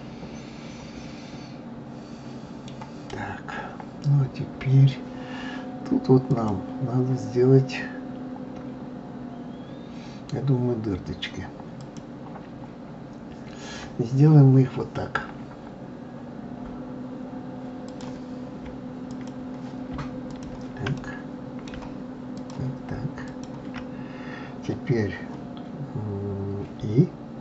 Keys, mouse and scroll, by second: 6.2 click, 11.8 click, 17.8 click, 19.1 click, 20.3 shift+click, 20.9-22.3 middle drag, 22.3 shift+click, 23.3 shift+click.